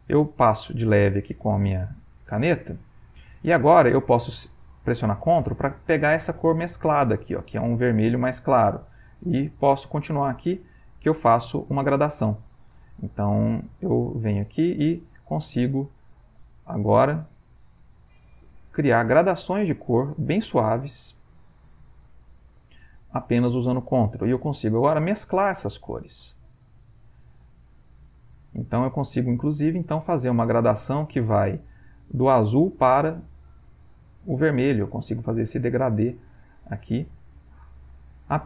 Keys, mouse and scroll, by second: 9.2 click, 32.6-38.4 ctrl+drag.